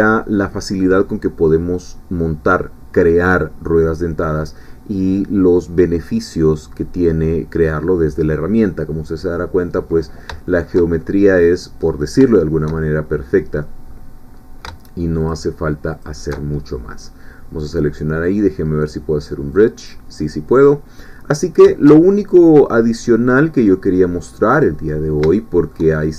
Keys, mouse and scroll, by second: 9.7-10.3 scroll down 2, 10.5 shift+middle click, 11.2 middle click, 11.9-12.2 scroll up 2, 12.3 shift+middle click, 12.8 shift+scroll down 1, 13.2 middle click, 13.9-14.2 scroll up 1, 15.3 alt+shift+click, 16.4 alt+shift+middle click, 17.7 click, 19.5 click, 20.2-21.2 middle drag, 21.2 scroll down 1, 21.3 scroll up 1, 21.5 scroll down 1, 21.7-24.8 shift+middle drag, 24.8 scroll down 1, 24.9 scroll up 1, 25.1 scroll down 1, 25.4-26.1 shift+middle drag.